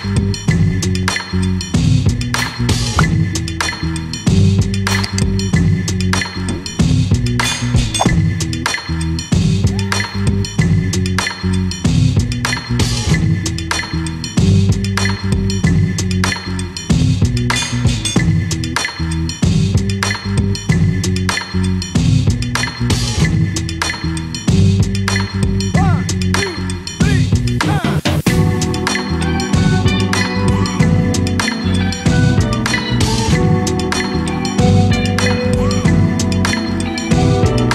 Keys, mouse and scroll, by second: 2.0 Tab, 3.2 3, 3.6 click, 5.6 e, 8.4-11.9 middle drag, 11.9-12.5 scroll down 2, 12.5-14.8 middle drag, 14.8 click, 15.1-16.8 middle drag, 16.8 click, 17.8 click, 18.6 e, 20.6-22.0 middle drag, 22.0 ctrl+r, 26.4 ctrl+r, 28.4 middle click, 28.6 Tab, 30.5 KP_7, 32.0-32.8 scroll down 1, 34.0 KP_Divide, 35.1-35.4 scroll up 1, 35.9 shift+a.